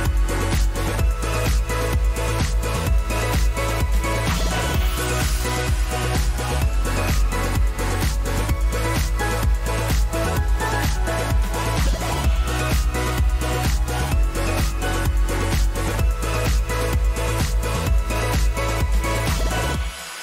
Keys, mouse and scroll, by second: 1.9 click, 2.7 click, 3.0 ctrl+a, 3.6-8.3 typing, 9.3-13.5 typing, 15.7 click.